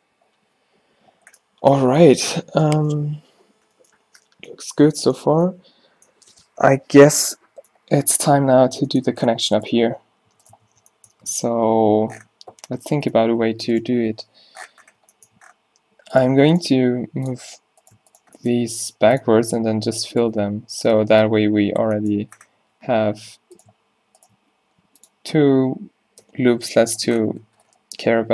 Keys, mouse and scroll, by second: 3.8 middle click, 9.8 Tab, 10.4 Tab, 10.6 Tab, 11.3 Tab, 11.6 Tab, 11.9 click, 13.1-14.3 drag, 14.1 o, 14.4 click, 14.8 click, 15.2 click, 15.7-16.8 middle drag, 16.8 click, 16.8 g, 18.4 middle click, 18.7 g, 19.5 middle click, 19.5 f, 21.0 f, 22.6 z, 24.4 g, 26.3 f, 26.8 Tab, 27.5 Tab.